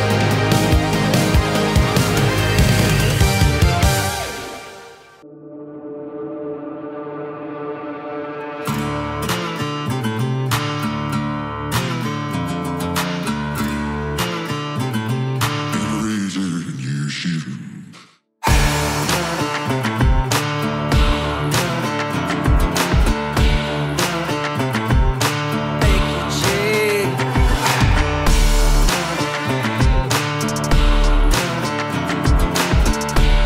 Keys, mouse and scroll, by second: 2.3 scroll down 1, 2.4 space, 5.6-6.2 click, 6.2 space, 9.3 space, 9.5 click, 9.9 right click, 10.6 click, 13.9 Return, 14.5-16.0 typing, 16.6 ctrl+space, 17.3-18.5 typing, 20.9 click, 24.0 scroll up 1, 24.0 typing, 24.9 click, 28.7 click, 31.4 click.